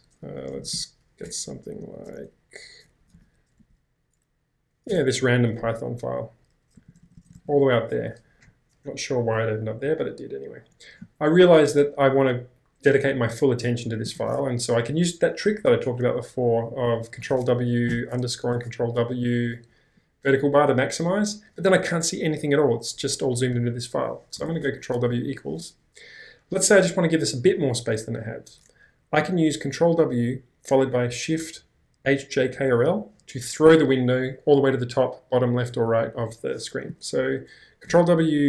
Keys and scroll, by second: 0.0-1.4 typing, 2.6-5.3 typing, 6.8-7.3 typing, 17.2 ctrl+w, 17.9 _, 18.8 |, 24.4 ctrl+w, 25.1 =, 37.9 ctrl+w.